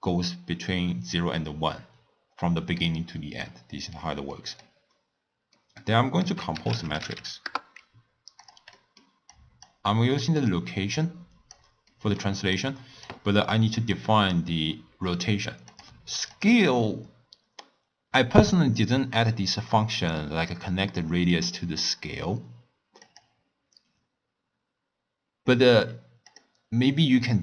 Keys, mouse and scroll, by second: 4.3-6.2 middle drag, 6.2 ctrl+a, 8.8 middle click, 9.3-10.5 drag, 11.9-12.6 middle drag, 12.6 click, 13.9 click, 15.8 click, 16.6 drag, 20.5 drag, 23.2 click, 26.5 click.